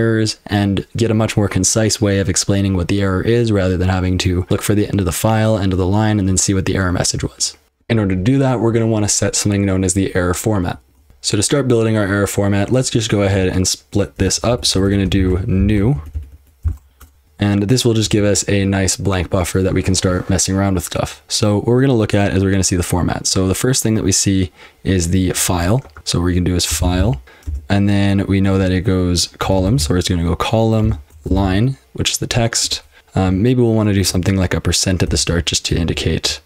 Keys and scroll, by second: 7.6 F12, 11.1 ctrl+w, 11.1 F12, 14.2-17.2 typing, 26.5-27.5 typing, 29.7 typing, 30.8-31.9 typing, 33.0 Left, 33.1 BackSpace, 33.2 BackSpace, 35.0-36.2 typing, 36.3 Left.